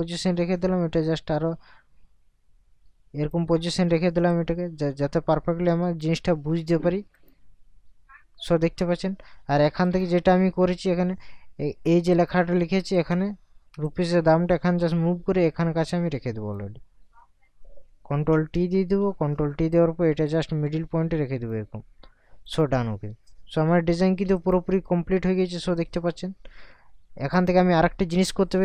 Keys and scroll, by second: 18.3 ctrl+t.